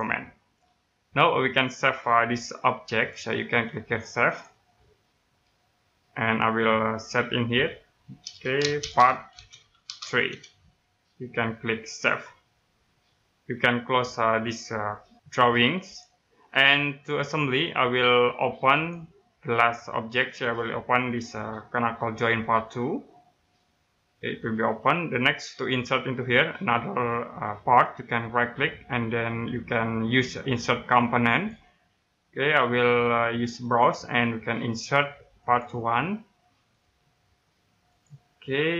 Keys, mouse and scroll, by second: 0.5 right click, 4.2 click, 8.8-9.8 typing, 11.9 click, 15.8 click, 18.7 click, 25.0 middle click, 25.1-26.1 scroll down 1, 26.3 middle click, 31.3 click.